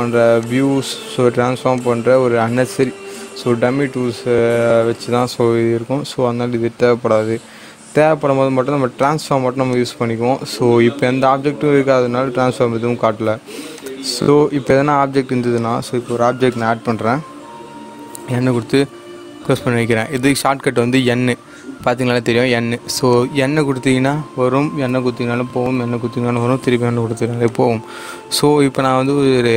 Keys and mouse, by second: 0.4 click, 9.0 click, 13.7 click, 14.6 click, 18.1 n, 20.6 n, 20.7 click, 23.1 click, 24.8-26.4 typing, 27.4 click, 28.9 shift+a.